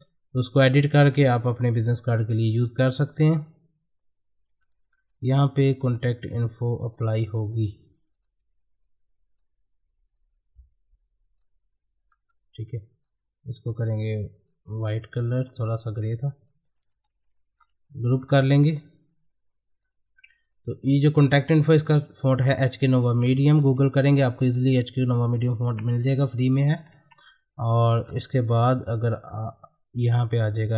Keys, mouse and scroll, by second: 2.5-4.5 drag, 4.7 middle click, 5.1 click, 5.6 middle click, 5.9 `, 6.2 click, 8.1 click, 8.8-12.1 drag, 12.1 middle click, 12.7-17.1 drag, 17.1 ctrl+g, 19.1-20.4 drag, 28.0-28.7 scroll down 1, 28.7 middle click, 29.7-30.7 drag.